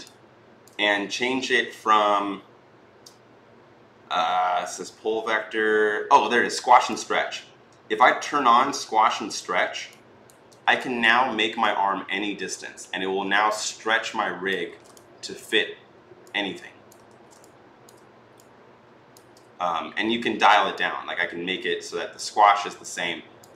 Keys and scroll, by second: 14.5 ctrl+z, 16.9 ctrl+z.